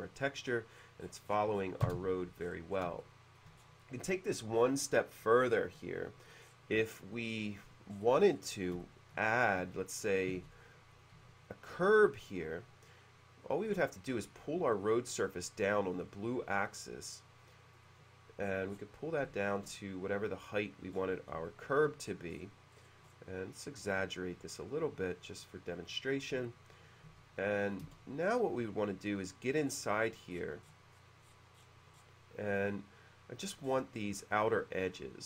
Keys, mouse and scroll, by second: 0.5-1.1 scroll down 1, 1.3-1.9 scroll down 1, 1.9 scroll down 1, 1.9 space, 2.4-2.7 scroll up 1, 2.9-3.4 shift+scroll up 1, 3.0 shift+middle click, 3.6-3.9 scroll down 1, 4.1 middle click, 5.5-5.8 scroll down 1, 6.5-6.8 scroll up 1, 7.9-8.3 scroll up 1, 8.9 shift+middle click, 9.4 click, 9.6 w, 10.4 space, 10.7 click, 11.0 click, 11.3 w, 12.3 click, 15.2 w, 15.2 space, 17.9 click, 18.5-19.1 scroll down 1, 19.3-20.6 shift+middle drag, 21.0-21.3 scroll down 2, 21.6 shift+middle click, 22.1-22.7 scroll up 2, 22.8-23.4 scroll up 2, 24.1 click, 26.0 click, 26.5-27.8 shift+middle drag, 27.9 space, 28.4 click, 28.5 click, 28.8 click, 29.2 click, 29.8 middle click, 31.7 middle click, 32.0 middle click, 32.6 click, 32.8 click, 33.7-34.0 scroll up 2, 34.4 click.